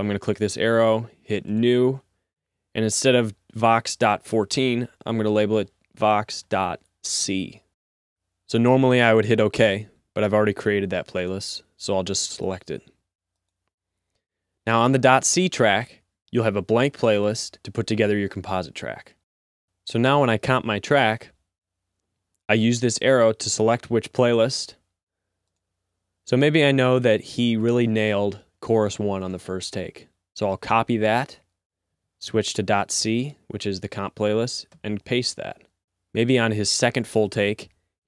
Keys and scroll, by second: 5.8 Right, 6.4 BackSpace, 6.6 BackSpace, 7.3 c, 15.2 r, 30.9 c, 35.0 v.